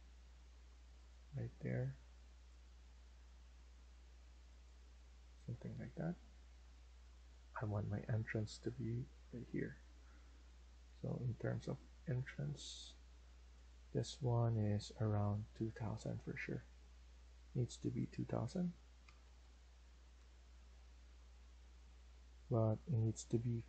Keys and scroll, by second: 4.8 Escape, 5.1 Escape, 7.7 Escape, 11.2 Escape, 18.7-19.6 typing, 20.0 Return, 20.4 Escape.